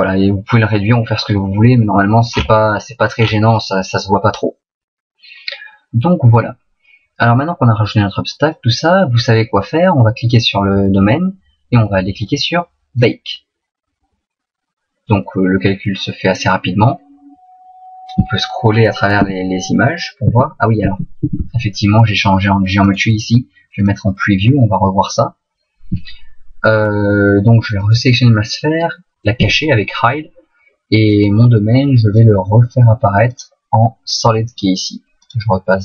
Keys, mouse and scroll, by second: 1.5 middle click, 2.3-3.2 scroll down 3, 3.2-4.7 scroll down 5, 10.3 right click, 13.0 click, 19.2 Right, 20.3 Right, 20.9 Left, 21.3 Left, 22.9 click, 27.8 right click, 29.5 h, 31.1 right click, 32.1 click, 33.3 click, 35.3 click.